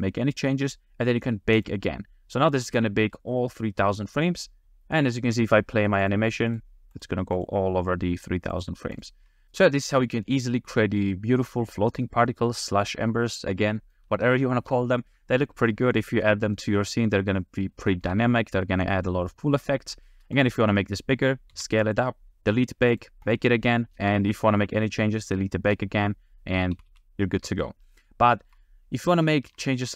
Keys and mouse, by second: 1.6-3.8 drag, 4.7 space, 6.1 click, 6.5 click, 6.6-7.0 middle drag, 7.0 click, 7.1 middle drag, 7.4 click, 8.1 click, 8.6 click, 9.0 click, 10.3-11.9 middle drag, 12.9-14.0 middle drag, 16.2-16.6 middle drag, 17.9 shift+middle click, 18.3-18.8 middle drag, 20.0 space, 21.5 s, 22.0-23.2 drag, 26.8 a, 26.9 a, 27.6-28.1 shift+drag, 28.1-28.6 shift+middle drag, 29.4 shift+middle drag, 29.8 g.